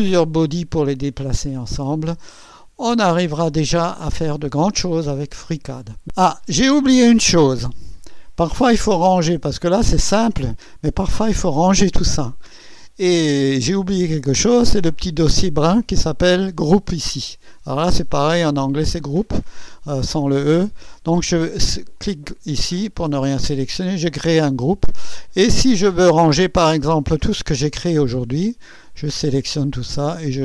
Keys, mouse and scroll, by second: 3.8 click, 5.2 scroll up 2, 6.1 click, 22.0 click, 23.9 click, 26.1 click, 26.9 click, 28.0 click, 29.3 ctrl+click, 29.9-30.4 ctrl+drag.